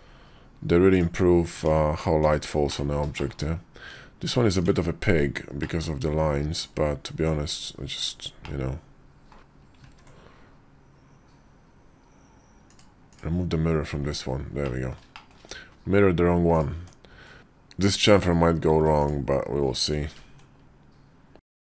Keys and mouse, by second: 1.4 Tab, 2.1 /, 2.5 middle click, 3.0 shift+middle click, 3.8 Tab, 5.5 middle click, 7.8 click, 8.3 middle click, 9.0 click, 9.3 Tab, 9.8 ctrl+`, 14.5 click, 15.0 shift+click, 16.6 Tab, 17.7 ctrl+click, 18.6 ctrl+z, 18.9 ctrl+click, 19.9 ctrl+b.